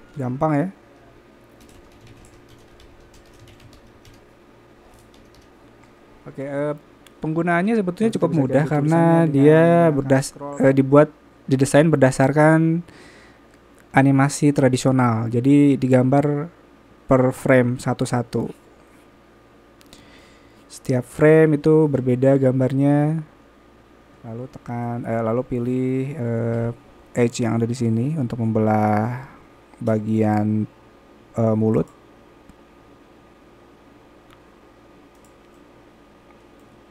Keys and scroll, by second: 0.0-4.7 typing.